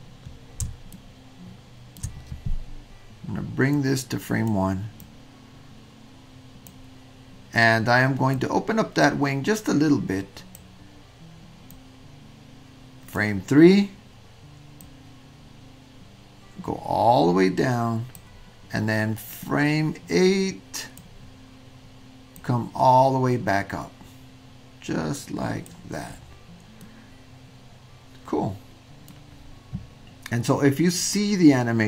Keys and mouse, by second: 0.9-2.0 shift+middle drag, 3.7 click, 5.1-5.6 drag, 6.7-8.4 middle drag, 10.7-11.8 middle drag, 13.0 drag, 14.9-18.2 drag, 19.5-21.1 drag, 22.3-25.7 drag, 26.8-29.2 middle drag.